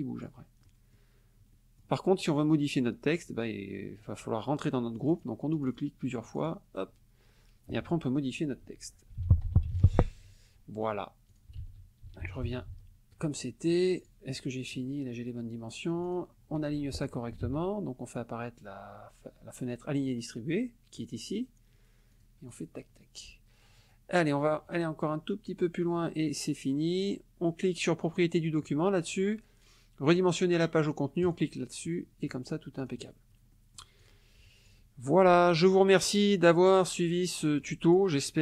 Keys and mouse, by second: 0.7 click, 1.1 middle click, 1.6 click, 3.1 click, 4.9 click, 5.5 click, 6.1 click, 8.9-10.3 typing, 11.3 ctrl+click, 11.6 ctrl+z, 13.4 ctrl+click, 14.0 ctrl+click, 14.5 ctrl+middle click, 16.0 shift+click, 17.4 ctrl+shift+a, 21.0 click, 22.1 click, 22.5 click, 25.5 click, 29.1 click, 30.1 click, 31.2 click, 32.8 click, 33.5 middle click, 34.0 click, 34.7 click, 35.7-38.0 ctrl+shift+drag.